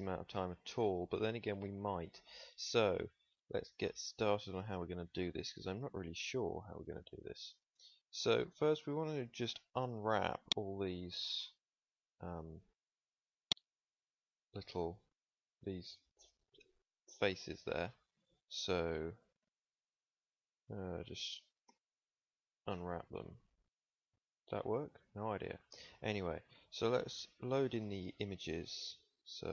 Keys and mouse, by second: 0.6 Tab, 6.1 click, 7.2 middle click, 7.4 middle click, 21.5 u.